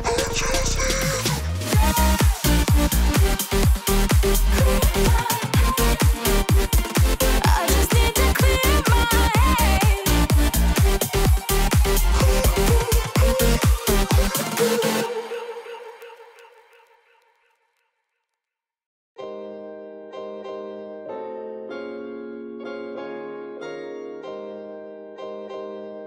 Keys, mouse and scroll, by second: 6.0 b, 7.3 alt+click, 10.1 alt+Return, 13.3 alt+click, 21.2 Return, 23.2 Tab, 23.7 alt+Tab, 23.8 ctrl+v, 25.0 Return, 25.3 ctrl+v, 25.5 ctrl+t.